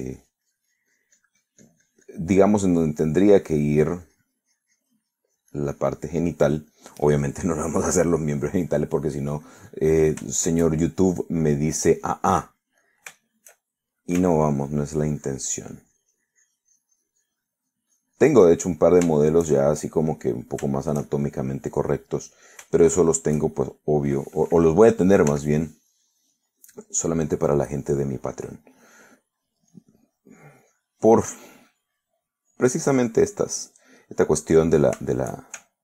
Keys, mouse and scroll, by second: 3.5 middle click, 4.4 middle click, 5.0-10.5 drag, 10.5 middle click, 12.3-13.8 shift+middle drag, 13.9-15.1 middle drag, 15.4-19.7 ctrl+drag, 19.7 ctrl+middle click, 20.2 ctrl+shift+middle click, 21.5 shift+middle click, 22.1-23.3 shift+middle drag, 23.7-25.0 shift+middle drag, 26.4 f, 27.0 click, 27.6-30.1 drag, 30.2 middle click, 30.8-33.7 drag, 33.8 click, 34.4 middle click, 35.1 middle click, 35.7 shift+click.